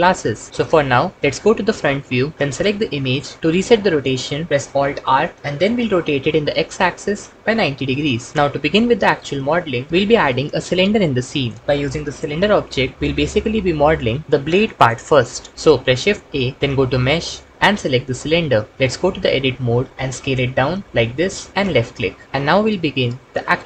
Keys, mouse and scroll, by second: 1.1 KP_1, 4.9 alt+r, 6.1 r, 6.2 x, 7.6 KP_9, 7.8 KP_0, 16.1 shift+a, 19.7 Tab, 20.0 s.